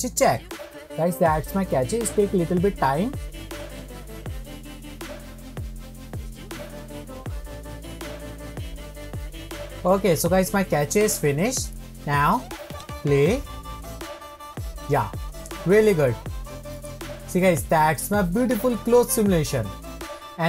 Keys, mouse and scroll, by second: 12.7-15.8 drag, 17.9 middle click.